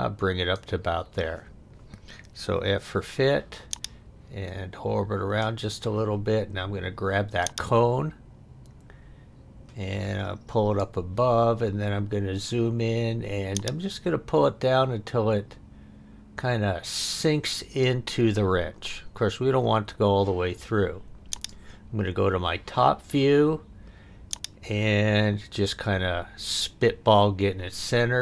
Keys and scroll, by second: 2.5 f.